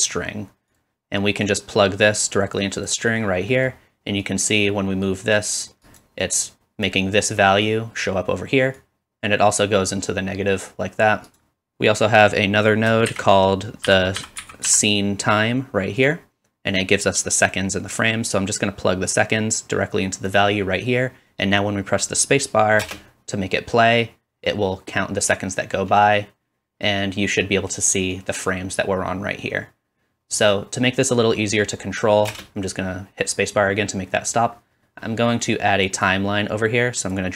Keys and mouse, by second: 5.3 middle click, 5.3 right click, 6.1 middle click, 6.4-11.4 drag, 11.4 middle click, 11.5-16.8 drag, 13.1 shift+a, 14.2 s, 16.8-18.3 middle drag, 18.3-37.3 drag, 22.8 space, 32.3 space.